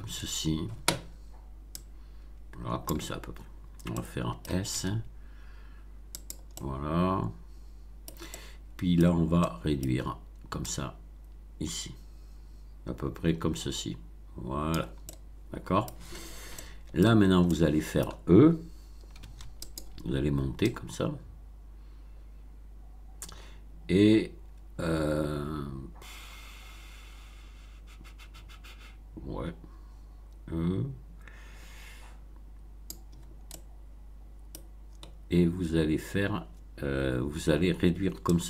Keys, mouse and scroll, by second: 1.7-3.0 drag, 3.8 middle click, 4.7 s, 6.1 click, 6.5-8.2 middle drag, 8.4 middle click, 9.0 scroll down 1, 9.3 middle click, 10.6-14.9 drag, 15.0-16.0 middle drag, 16.5 shift+middle click, 17.4 shift+middle click, 19.2 e, 19.6 click, 20.6-33.0 drag, 33.4-34.7 middle drag, 38.2-38.4 drag.